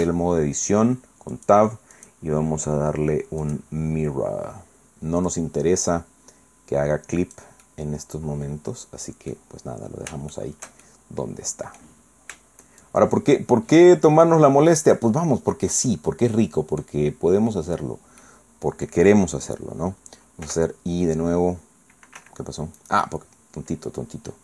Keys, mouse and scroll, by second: 1.3 click, 1.9 click, 3.4 click, 5.3-7.5 drag, 7.7-9.5 drag, 9.6 middle click, 10.3-12.0 shift+drag, 12.1 middle click, 12.8-15.1 shift+drag, 15.3 scroll down 1, 15.5 scroll up 1, 15.5-17.0 drag, 17.1 scroll up 1, 17.7 scroll down 1, 18.2 click, 20.5 i, 22.2 Escape, 22.8 click.